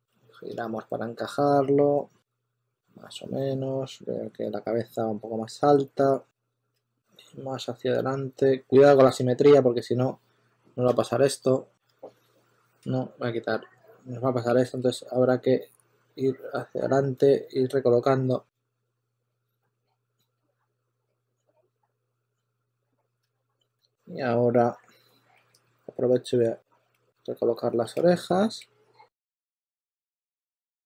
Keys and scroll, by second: 6.3 w, 6.7 super+z, 10.8 super+z, 11.8 shift+z, 14.6 super+z, 18.5 z, 19.1 z, 23.1 super+z, 23.4-25.3 typing, 26.9 w, 27.9 super+a, 28.4 w, 30.2-30.8 typing.